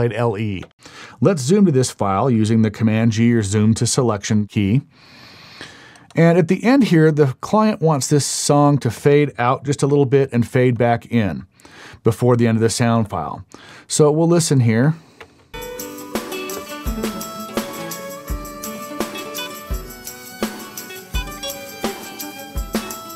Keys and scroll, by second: 3.6 super+g, 15.2 space, 17.0 Up, 17.2 Up, 19.6 Down.